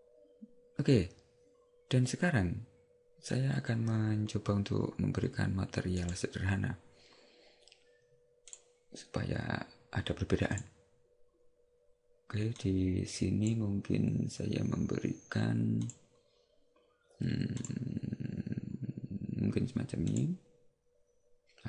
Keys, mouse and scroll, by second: 6.1 right click, 8.6 click, 12.7 click, 15.9 click.